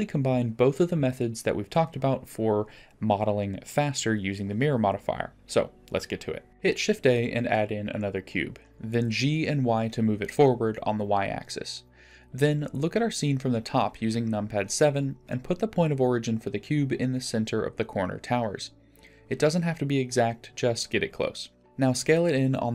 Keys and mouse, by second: 0.4 ctrl+a, 2.4 ctrl+a, 3.5-3.9 drag, 5.5-6.5 drag, 9.7 shift+a, 12.5 g, 16.0 KP_7, 17.8 click, 18.0 g, 21.0-22.7 drag, 21.5 s.